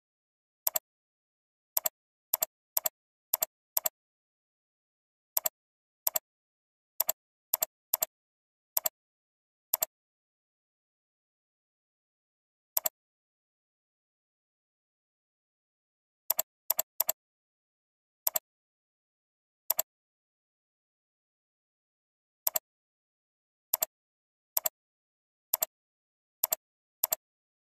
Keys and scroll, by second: 15.0 ctrl+h, 16.6 alt+space, 19.2 ctrl+space.